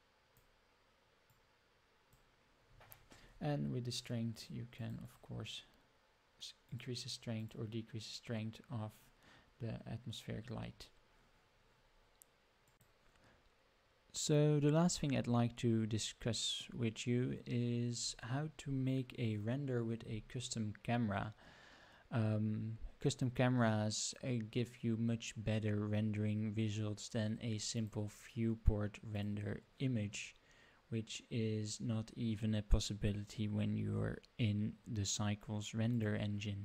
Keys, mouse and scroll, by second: 1.3 click, 4.3 click, 4.8 click, 5.0 click, 6.6 click, 7.4 click, 12.8 middle click, 12.8 scroll down 4, 14.7 click, 14.9-16.6 middle drag, 17.2 scroll up 2, 27.7-29.5 drag.